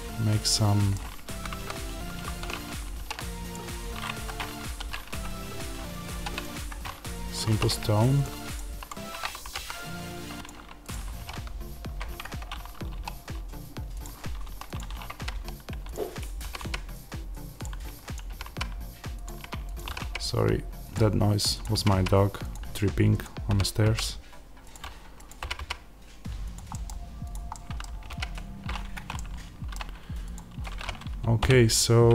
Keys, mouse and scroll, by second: 1.2 ctrl+z, 4.2 Escape, 6.6 Escape, 7.4 3, 7.5 click, 8.7 shift+click, 9.4 g, 10.4 click, 11.1 g, 12.1 Escape, 12.9 e, 13.9 click, 14.3 1, 14.6 click, 15.1 g, 15.8 click, 16.4 g, 17.5 click, 18.2 g, 19.1 click, 19.8 g, 21.5 click, 21.6 g, 22.4 click, 23.4 g, 24.6 click, 25.3 g, 26.5 click, 26.6 middle click, 27.2 click, 27.4-30.3 middle drag, 30.3 click, 31.3 o.